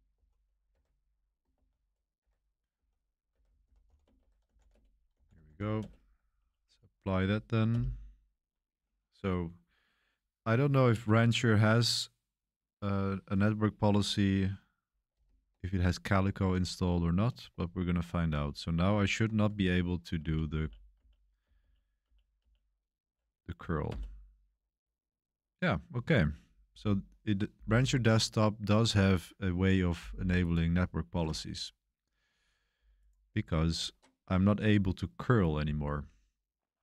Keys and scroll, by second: 0.0-0.1 typing, 0.6 Escape, 1.5-6.2 typing, 2.1 Escape, 6.3 Page_Up, 6.6 Page_Up, 7.6 Return, 20.1 Up, 20.5 Up, 20.9 Up, 21.4 Up, 21.5 Up, 22.0 typing, 23.8 Return.